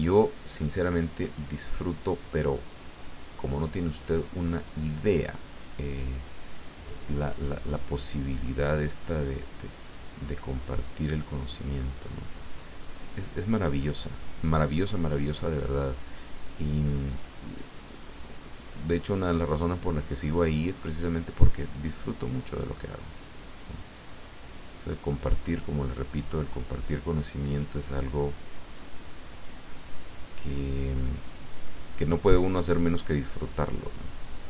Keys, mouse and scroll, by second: 1.2 click, 3.9 click, 7.2 click, 9.9-15.9 drag, 18.2-22.0 drag, 23.3-26.4 drag, 28.0 click, 30.0-32.4 drag, 33.5-34.4 drag.